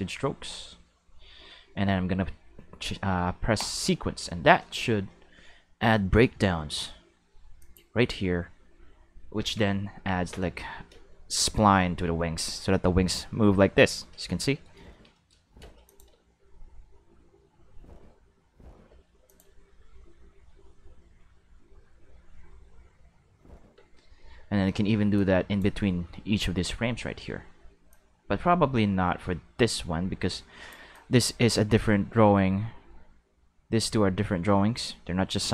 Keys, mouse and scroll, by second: 3.6 click, 7.6 click, 9.4 alt+a, 10.2 Tab, 10.9 space, 15.6 space, 15.9 click, 16.1 space, 18.9 space, 19.3 click, 19.5 space, 23.7 space, 25.1 click, 27.9-30.7 drag, 30.9-35.5 drag.